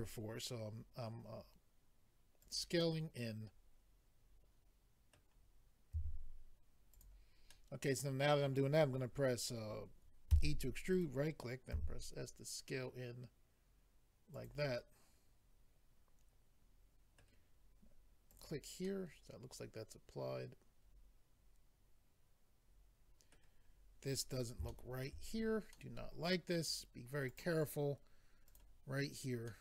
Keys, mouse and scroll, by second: 2.4 click, 2.8 middle click, 5.9 s, 6.9 click, 7.5 middle click, 10.9 right click, 11.7 s, 14.3 click, 14.7 middle click, 18.3 click, 18.8 middle click, 23.7 scroll up 2, 24.3-24.6 scroll up 1, 24.7 shift+middle click, 25.3-25.7 scroll up 3, 25.7 middle click, 27.3 click, 28.5 click, 29.5 middle click.